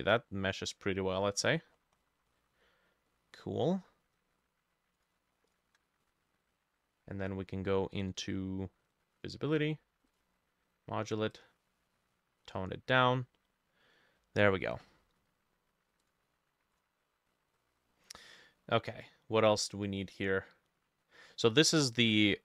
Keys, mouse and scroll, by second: 1.5-3.1 scroll down 20, 2.3 middle click, 3.1 middle click, 5.5 shift+click, 17.3 scroll down 2, 17.6 middle click, 18.5 middle click, 18.7-19.7 scroll down 1, 21.4 middle click.